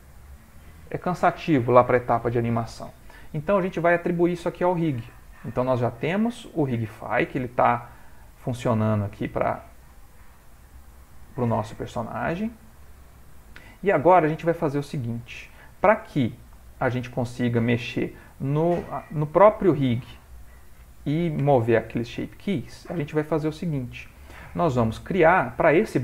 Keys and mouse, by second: 1.2 click, 3.1 middle click, 3.8 middle click, 6.1 middle click, 6.1 click, 7.7 ctrl+Tab, 8.4 g, 11.2 click, 11.5 r, 14.2 middle click, 16.6 shift+middle click, 18.5 click.